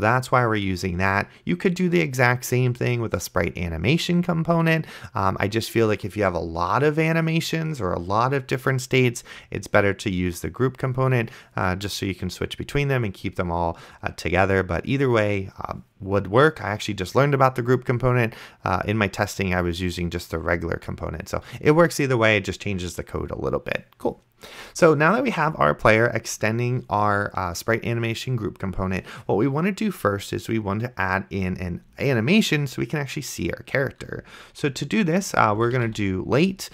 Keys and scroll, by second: 35.5-36.7 typing.